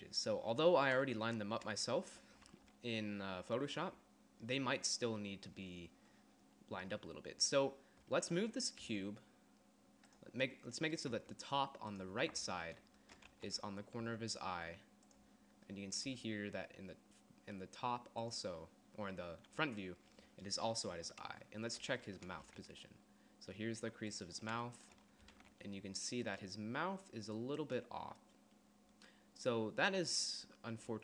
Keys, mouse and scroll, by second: 8.8 g, 11.1 g, 13.3 z, 14.0 g, 16.2 g, 22.6 g, 25.3 g.